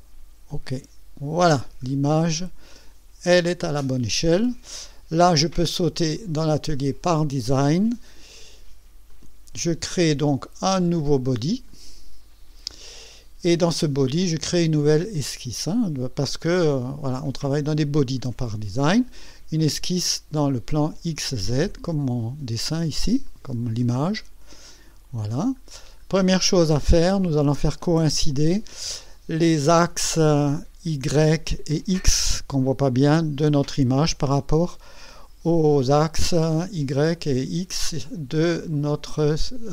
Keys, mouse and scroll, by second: 0.5 click, 1.8 scroll up 2, 2.7-3.5 right drag, 3.6 scroll up 2, 4.3-4.9 right drag, 6.1 click, 7.0 click, 9.1 click, 11.7 click, 15.2 click, 23.2 click, 24.1 click, 25.2-26.0 scroll down 2, 26.0 scroll up 1, 26.3-27.0 right drag, 27.2 scroll up 1, 27.8-28.8 right drag, 29.0 scroll down 1.